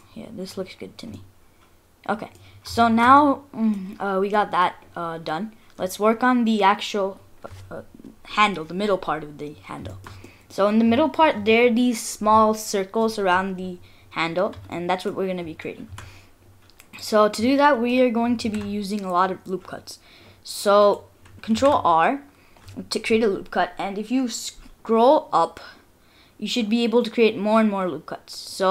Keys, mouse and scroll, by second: 0.0-0.4 scroll up 3, 0.5-1.3 scroll down 5, 1.1 middle click, 2.4-2.8 scroll up 2, 2.8 shift+middle click, 3.2 middle click, 4.2 scroll up 2, 4.3 middle click, 4.8-5.4 scroll down 4, 9.3-9.6 scroll up 3, 9.9 shift+middle click, 10.2 middle click, 14.1-14.5 scroll up 1, 14.8 shift+middle click, 15.2 shift+scroll down 1, 15.7-16.9 scroll down 4, 15.9 Tab, 16.9 click, 17.6 middle click, 18.4 ctrl+r, 21.7 ctrl+r.